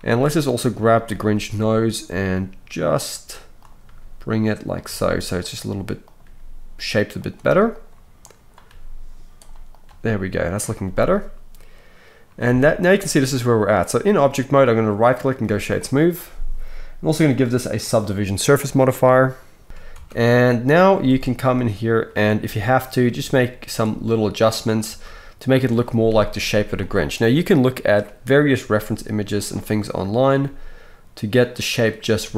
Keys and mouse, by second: 0.0 click, 1.3-4.8 middle drag, 1.3 g, 3.8 g, 4.8-6.2 drag, 6.1 g, 6.2-7.7 middle drag, 6.2 g, 7.7 click, 7.8 middle click, 8.2-9.4 drag, 8.6 g, 9.4-15.0 middle drag, 9.8 g, 12.4 Tab, 15.0-20.8 right drag, 17.1-20.8 drag, 17.1-23.9 middle drag, 19.6 shift+KP_1, 19.9 Tab, 20.9 z, 22.4 g, 23.9 right click, 24.3-25.9 middle drag, 24.9 g, 25.9-29.4 shift+right drag, 26.4 z, 28.6 g, 29.4 middle click, 29.8-31.5 drag, 30.4 g, 31.5-32.3 middle drag, 32.2 g.